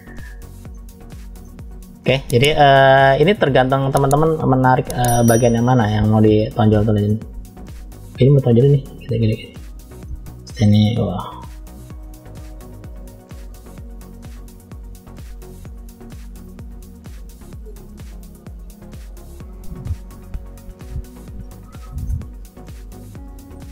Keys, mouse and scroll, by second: 0.5 middle click, 1.3 middle click, 1.9-2.4 scroll up 2, 2.6 shift+middle click, 3.5 click, 4.2 click, 4.8 click, 5.2 click, 5.5 click, 5.9 click, 6.2 click, 6.4 click, 7.0 middle click, 7.9 click, 8.4 click, 9.0 click, 9.4 click, 10.0 middle click, 11.1 click, 11.6 click, 12.0 click, 12.8 click, 13.3 click, 14.0 click, 15.9 click, 17.2 click, 17.9 click, 18.5 click, 19.1 click, 19.6 click, 20.1 click, 20.6 click, 21.0 click, 21.5-21.9 scroll down 1, 21.9-23.6 middle drag.